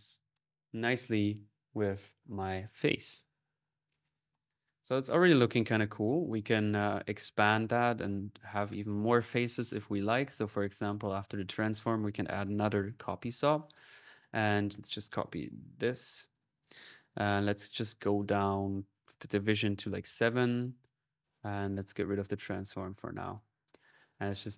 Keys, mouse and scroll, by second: 4.9-6.1 drag, 6.1 right click, 7.0 click, 7.6 middle click, 8.0 click, 8.6-9.9 middle drag, 10.5 click, 11.4 right click, 11.6-13.9 typing, 11.7-13.4 drag, 13.5 click, 14.9-15.9 right drag, 15.7-16.4 typing, 16.1 ctrl+click, 16.5 ctrl+click, 17.5 ctrl+s, 17.5-20.5 ctrl+drag, 19.1 ctrl+v, 21.7-23.8 drag, 23.9 click, 24.3-24.5 middle drag.